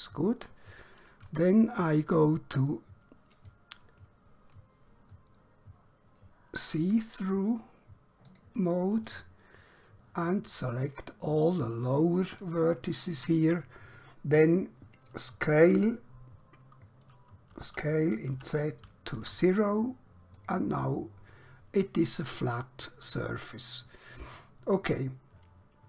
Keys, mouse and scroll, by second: 1.2-1.6 scroll up 1, 3.5 click, 5.2 shift+middle click, 8.3 click, 17.5-19.2 typing, 20.5 click, 22.7 middle click.